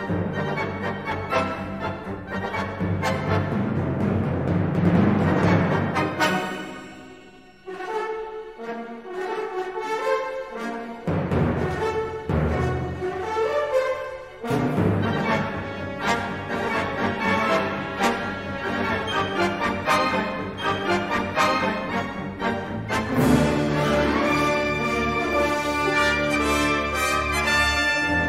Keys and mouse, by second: 0.1 ctrl+r, 10.7 middle click, 12.6 3, 14.2 s, 16.0 ctrl+r, 19.7 3, 20.6 s, 23.4 shift+middle click, 26.8 3.